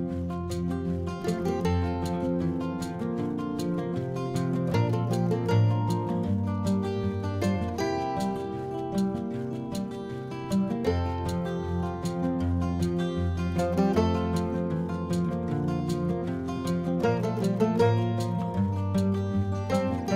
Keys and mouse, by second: 0.3 click, 8.6 middle click, 9.6 click, 10.3 Tab, 10.7 click, 12.6 Tab, 13.5 Tab, 13.7 click, 13.8 click, 15.5-18.0 typing, 15.8 Delete, 15.9 Delete, 17.0 Delete, 17.1 Delete, 17.2 Delete, 17.3 Delete, 18.4 Delete, 18.5 Delete, 18.6 Delete, 18.7 Delete, 18.8 Delete, 18.8 Tab.